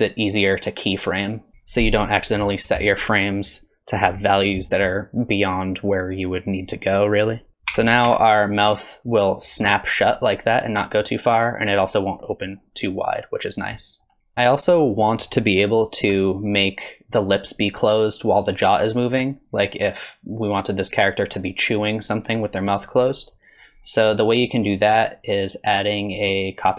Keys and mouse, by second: 7.5 r, 7.7 r, 14.4 click, 14.8-15.2 middle drag, 16.0 g, 23.8 middle click, 24.9 click, 26.0-26.7 drag.